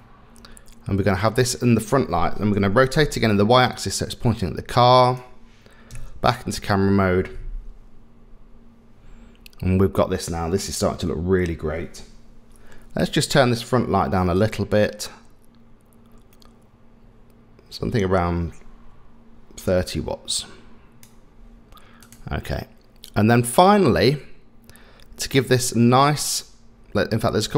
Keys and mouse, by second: 2.7 r, 5.9 KP_0, 14.5-21.0 drag, 27.0 middle click.